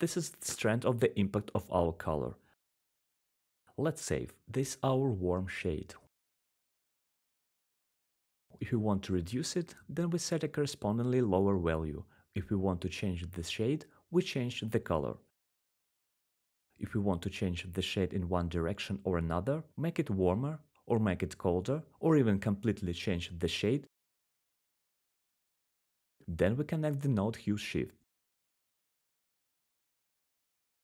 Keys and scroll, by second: 0.0-0.8 typing, 1.1 Return, 7.0 typing, 7.9 Return, 13.7-14.5 typing, 14.9 Return, 22.2-22.6 typing, 30.4 1.